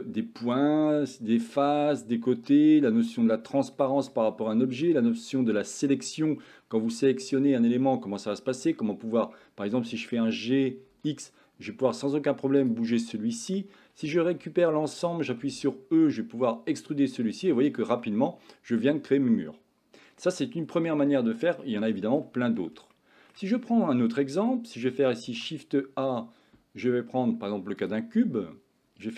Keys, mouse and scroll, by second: 0.0 click, 3.2 middle click, 4.1 middle click, 5.6-6.6 drag, 6.6 middle click, 10.2 g, 13.2 middle click, 14.0 a, 14.3 a, 15.5 e, 18.1-20.3 middle drag, 21.7 middle click, 22.3 Tab, 23.0-23.4 shift+middle drag, 23.9 middle click, 25.3 shift+a.